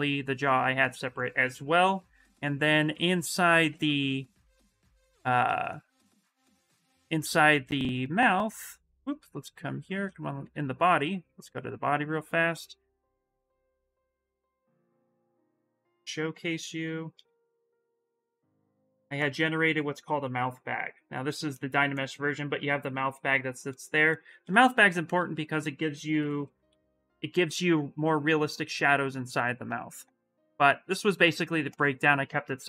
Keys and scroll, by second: 13.4 shift+f, 14.5 shift+f, 17.1 shift+f, 25.9 shift+f, 26.4 shift+r.